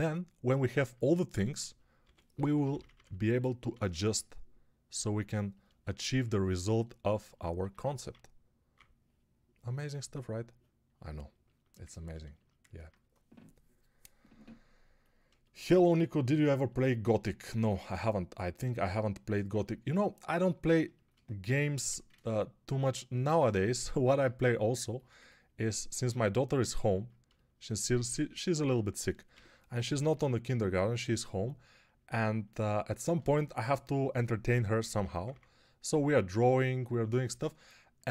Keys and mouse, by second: 1.9-3.9 typing, 7.5-8.6 typing, 21.6 1, 29.2-30.1 typing, 33.2 1, 34.6 p, 35.0 [, 35.2 [.